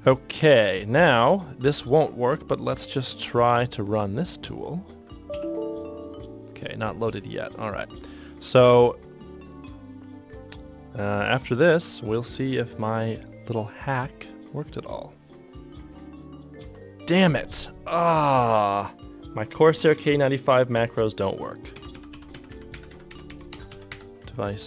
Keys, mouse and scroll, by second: 5.5 y, 16.6 ctrl+F23.